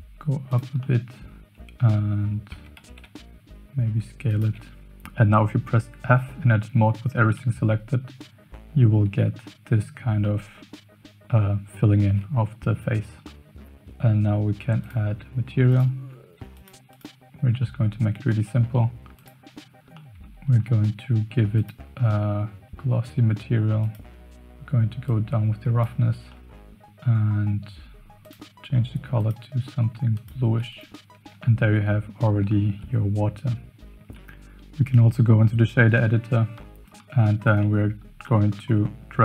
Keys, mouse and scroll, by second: 0.9 middle click, 2.5 Tab, 2.8 s, 7.3 f, 10.2 middle click, 12.1 Tab, 13.2-13.6 middle drag, 14.8 click, 15.7 click, 16.5 click, 16.9 click, 17.6 middle drag, 18.6 z, 19.9 middle drag, 21.6-24.0 drag, 25.0 click, 26.3-26.8 middle drag, 28.2 click, 31.1 KP_0, 31.4-31.7 shift+middle drag, 32.5-32.8 shift+middle drag, 34.0 shift+middle click, 36.6-36.9 shift+middle drag, 37.7 middle drag, 38.3 middle click.